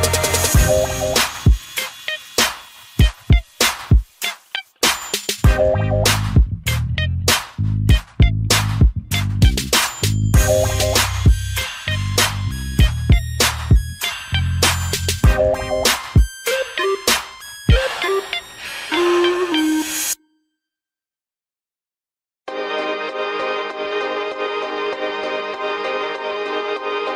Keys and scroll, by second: 6.0 ctrl+0, 9.7 ctrl+alt+shift+e.